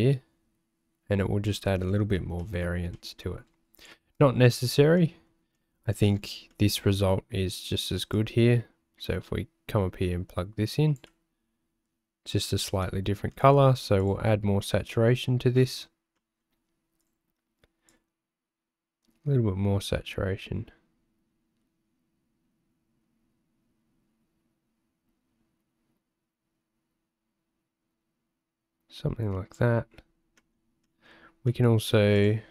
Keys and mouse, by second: 2.5 click, 2.9 click, 5.0 click, 5.6 middle click, 6.6 middle click, 8.1-11.0 drag, 13.0 middle click, 16.2 middle click, 17.0 click, 30.5 click, 31.0 middle click, 31.6 middle click, 32.2-32.5 drag.